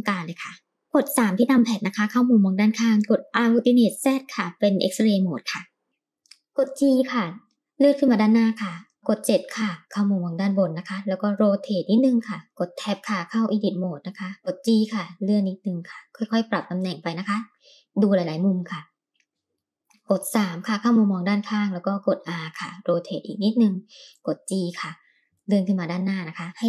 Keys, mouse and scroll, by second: 0.8 middle click, 0.9 KP_3, 2.6 alt+z, 6.4 g, 9.2 KP_7, 11.2 r, 12.5 Tab, 13.7 g, 17.4 Tab, 18.5-19.7 middle drag, 20.7 KP_3, 22.1 r, 24.6 g, 26.4 KP_3, 26.4 r.